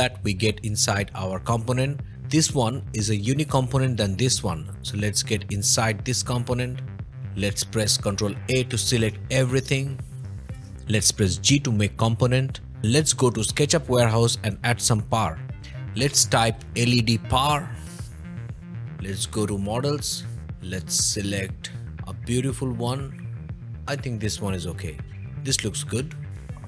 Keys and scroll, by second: 7.3 ctrl+a, 10.1 ctrl+a, 16.3-17.8 typing, 18.1 Return.